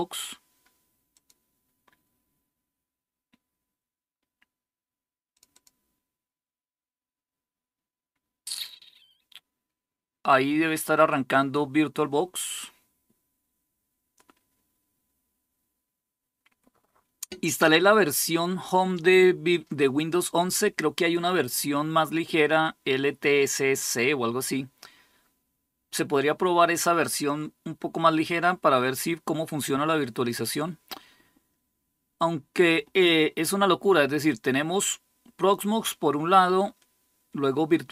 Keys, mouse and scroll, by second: 5.1-37.9 drag.